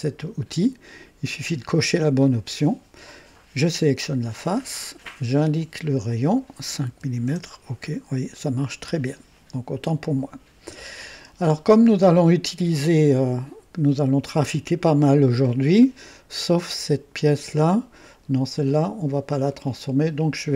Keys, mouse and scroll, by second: 0.9 click, 4.0 click, 5.5 click, 6.9 KP_5, 7.3 KP_Enter, 19.4 click.